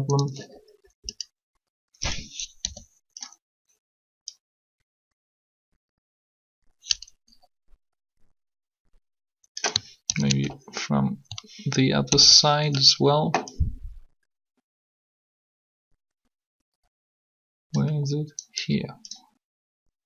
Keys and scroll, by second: 2.6 r, 9.9 ctrl+3, 12.0 ctrl+3.